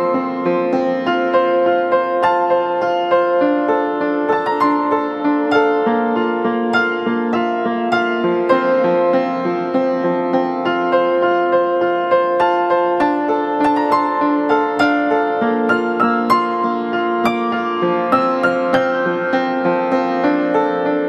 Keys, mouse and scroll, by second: 1.7 double click, 2.3-2.8 typing, 2.7 double click, 2.9 double click, 12.4-15.2 scroll up 1.